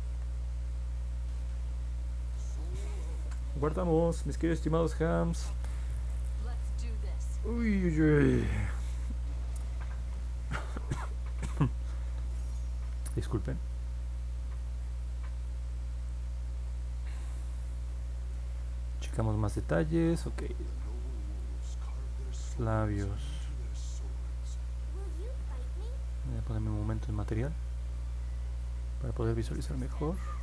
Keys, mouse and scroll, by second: 0.2-0.7 scroll down 2, 1.0 middle click, 1.4 alt+click, 3.2 ctrl+s, 14.5-16.0 alt+drag, 24.2 middle click, 26.2 click, 26.9 click, 29.1-30.4 alt+drag.